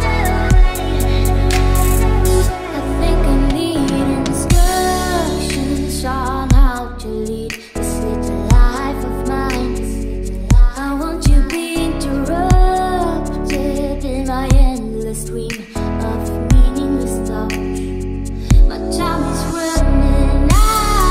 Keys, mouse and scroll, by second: 0.5 space, 4.7 Tab, 5.1 Tab, 5.5 a, 6.5 space, 10.7 middle click, 12.0 a, 12.9 middle click, 13.9 Tab, 19.1-19.6 middle drag, 19.8 Tab, 20.0-21.1 typing.